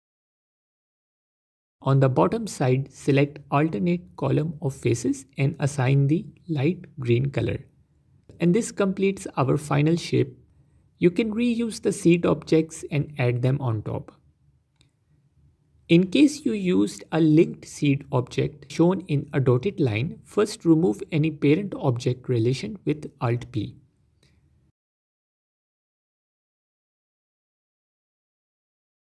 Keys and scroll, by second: 1.1 Tab, 3.3 Tab, 10.7 Tab, 21.5 shift+d, 22.9 5.